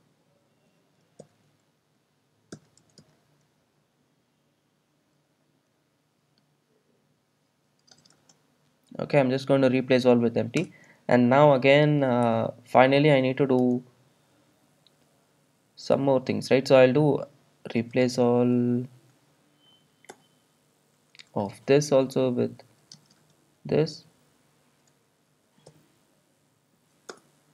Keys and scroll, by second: 12.4 Return, 20.2 Return, 25.8 alt+super+l.